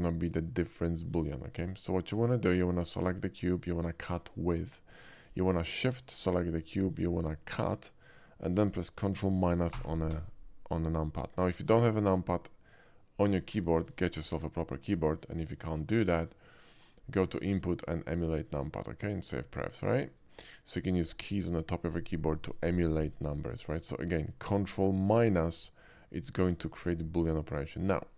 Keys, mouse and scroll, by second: 0.1-0.5 shift+middle drag, 1.6 shift+middle drag, 2.9 click, 6.6 shift+click, 9.8 ctrl+KP_Subtract, 12.4 click, 13.3 click, 17.1 click, 18.1 click, 18.5 click, 20.1 click.